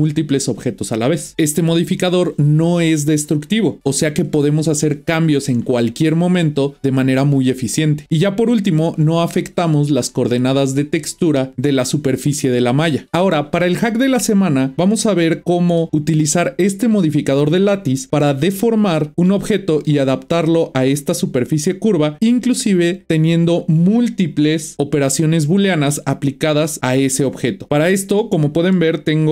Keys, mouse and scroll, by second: 13.1 middle click, 15.0-19.1 middle drag, 19.8-22.8 middle drag, 23.3 click, 27.7-28.2 scroll up 1, 28.2-28.9 middle drag, 28.9-29.3 scroll up 1.